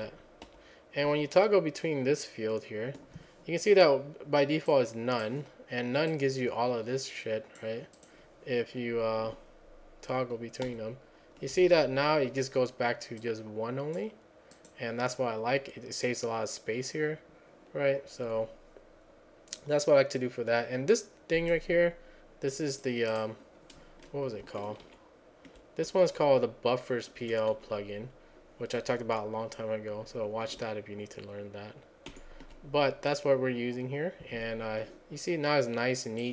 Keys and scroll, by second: 0.0 alt+-, 0.5 alt+-, 1.1 alt+-, 10.7 alt+-, 24.9 alt+Left, 25.9 Up, 27.2 Down, 27.6 Up, 32.1 alt+Right.